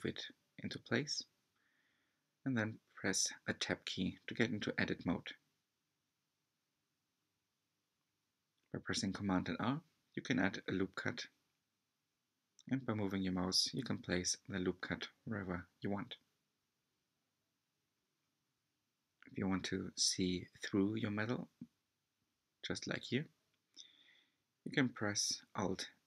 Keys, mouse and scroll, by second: 0.1 alt+z, 1.0-1.7 scroll up 1, 1.7-2.7 scroll up 2, 2.7 shift+middle click, 3.2-4.8 scroll up 1, 5.0 r, 9.7-10.3 scroll up 2, 10.3 ctrl+y, 13.4-14.0 scroll down 2, 14.0-15.9 shift+middle drag, 16.4 ctrl+y, 16.7 click, 18.2 click, 20.1 s.